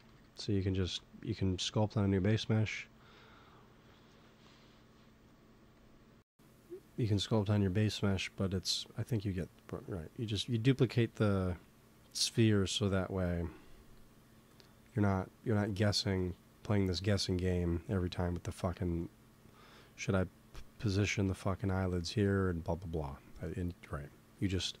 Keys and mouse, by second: 0.7 ctrl+s, 2.1 Tab, 2.7-4.7 drag, 5.7-11.1 drag, 13.0-16.7 drag, 20.8 click, 21.0 z, 21.5 z, 23.8-24.8 drag.